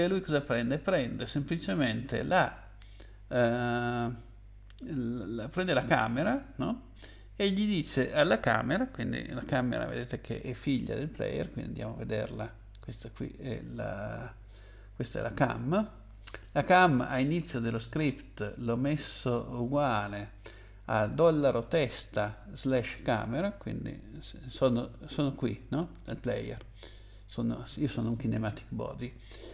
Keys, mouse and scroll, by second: 5.7 click, 6.0 double click, 12.1 click, 16.2 click, 16.4 click, 17.0-17.7 scroll up 8, 27.9 click, 28.1 click.